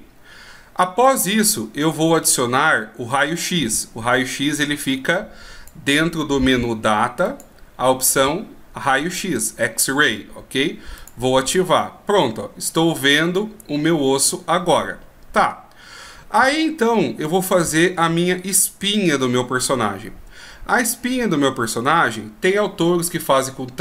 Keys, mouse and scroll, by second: 3.4 click, 4.8 click, 7.4 click, 11.2 click, 12.4 middle click.